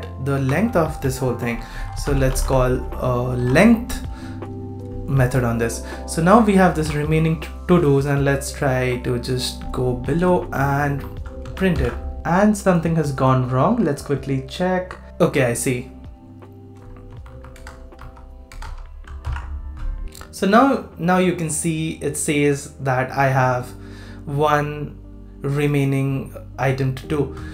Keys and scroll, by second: 3.4 super+s, 6.7 super+c, 11.4 super+v, 11.7 super+s, 19.2 super+s.